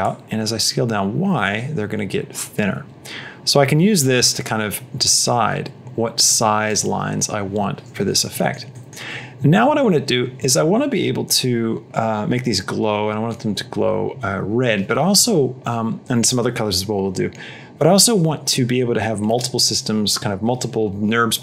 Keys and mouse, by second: 8.2 middle click, 8.7 middle click.